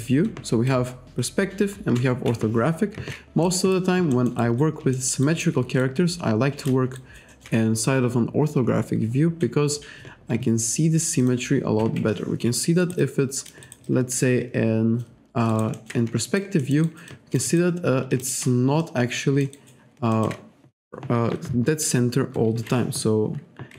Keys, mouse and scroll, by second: 0.7 F5, 2.0 F6, 3.5 alt+right click, 4.1 alt+middle click, 4.4 alt+right click, 5.0 alt+middle click, 5.8 shift+right click, 7.0 alt+right click, 11.2 click, 11.8 F5, 12.8 alt+right click, 13.0 alt+click, 15.5 alt+right click, 16.3 alt+right click, 16.6 alt+middle click, 17.1 alt+click, 17.5 alt+right click, 18.2 alt+shift+click, 18.8 alt+middle click, 20.1 alt+middle click.